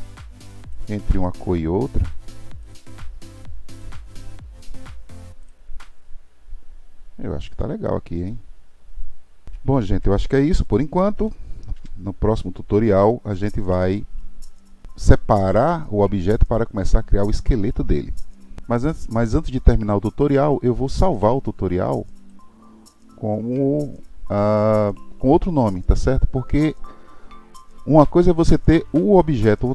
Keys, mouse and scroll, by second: 7.3-8.3 scroll down 4, 8.3-9.5 middle drag, 9.5-10.6 scroll down 5, 10.6 click, 11.8 KP_1, 13.0-15.2 shift+middle drag, 22.2-25.3 drag.